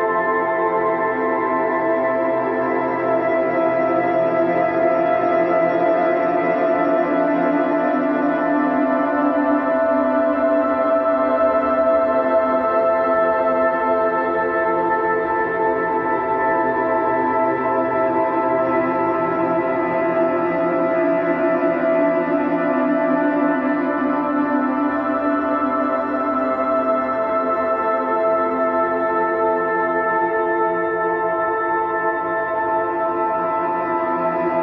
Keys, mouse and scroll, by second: 1.3 click, 2.3 click, 3.1 s, 6.5-8.3 middle drag, 8.3 g, 9.6-10.9 middle drag, 10.9 shift+right click, 11.7 shift+a, 15.3-16.9 drag, 16.9 r, 20.6 click, 21.4 s, 23.0 g, 24.4 middle click, 24.9-25.3 scroll up 1, 25.3 shift+middle click, 26.1-27.8 drag, 27.8 a, 28.7 f, 29.2-30.2 middle drag, 30.2-30.8 scroll up 2, 30.8 e, 33.5-34.6 middle drag.